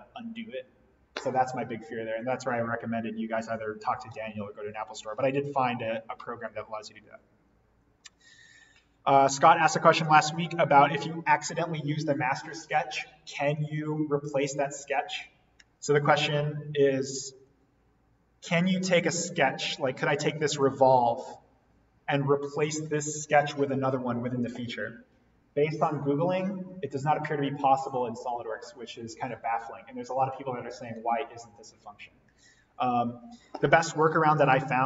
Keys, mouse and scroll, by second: 4.2 scroll down 1, 6.8-7.3 scroll down 1, 7.7 scroll up 1, 17.2 click, 34.2 click.